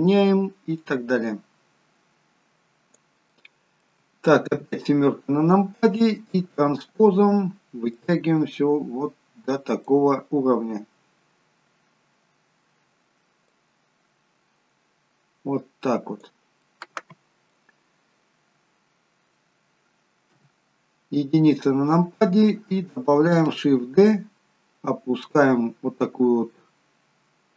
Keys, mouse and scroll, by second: 3.2 middle click, 4.5 KP_7, 5.4-6.3 scroll down 1, 6.3 scroll down 3, 8.0 click, 13.4 click, 16.6 middle click, 20.3 KP_1, 21.7-22.5 scroll up 2, 23.9 shift+d.